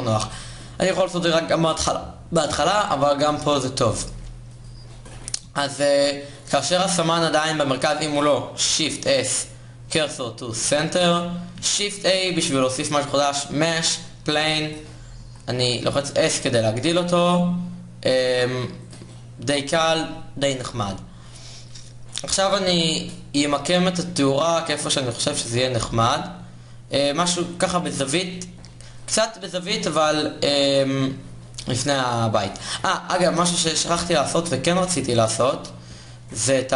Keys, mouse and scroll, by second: 8.5 shift+s, 11.5 shift+a, 13.9 s, 14.9 s, 20.4 a, 22.5 KP_7, 23.1 g, 33.1 KP_0, 33.4 KP_1, 34.4 KP_5.